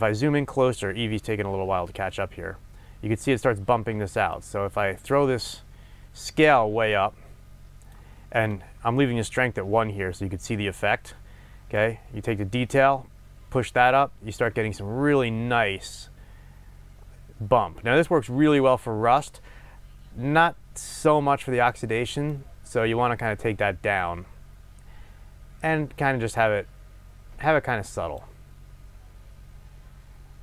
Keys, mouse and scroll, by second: 2.4 scroll up 1, 28.6 scroll down 1.